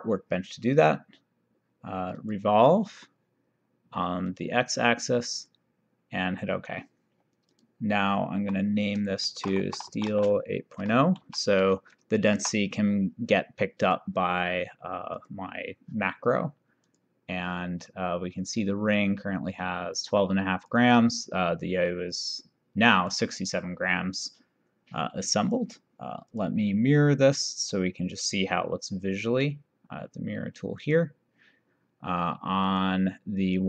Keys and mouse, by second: 2.3 click, 4.3 click, 7.5 click, 8.5 F2, 9.4-12.1 typing, 13.9 click, 15.1 click, 16.9 click, 19.0 click, 20.8 click, 22.1 click, 25.6 click, 30.9 click, 32.7 click.